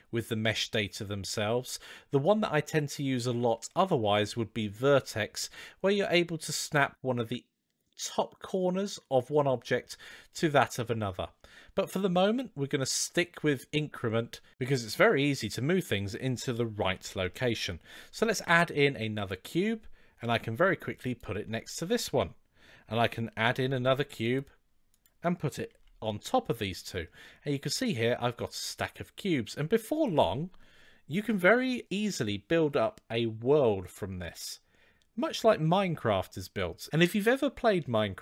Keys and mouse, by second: 7.7-8.2 middle drag, 12.1-14.2 drag, 18.0 shift+a, 20.0 g, 23.3 shift+a, 25.5 g, 27.0-29.3 middle drag.